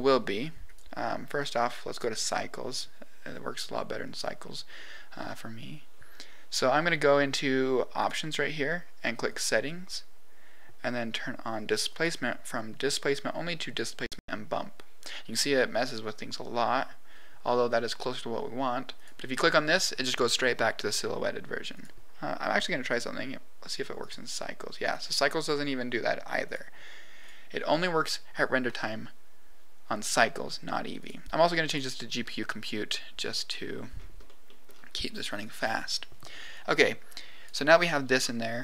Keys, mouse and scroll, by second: 0.6 click, 1.3 click, 7.9 click, 9.2 click, 11.8-13.8 drag, 17.0-17.6 scroll down 3, 17.7 scroll up 1, 19.0-20.1 drag, 21.7-23.0 drag, 24.0 click, 26.4 click, 30.9 click, 32.8 middle click, 33.9-34.2 scroll up 3, 34.2 middle click, 34.7 scroll down 3, 35.1 middle click, 36.5 click.